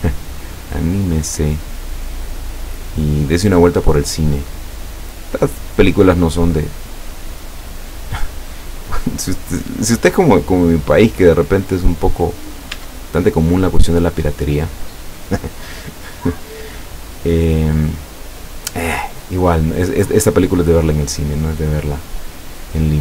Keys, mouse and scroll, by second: 1.4-3.5 scroll up 10, 4.3 scroll down 2, 4.8 scroll down 2, 6.2 middle click, 6.9-7.9 middle drag, 9.1 right click, 10.1-11.6 drag, 11.7 scroll down 1, 12.2-12.9 middle drag, 12.8 Tab, 13.5-15.2 middle drag, 15.9-16.8 middle drag, 17.3-18.7 middle drag, 19.1 scroll up 1, 20.1 scroll down 1, 20.6 middle click, 20.8 scroll down 1.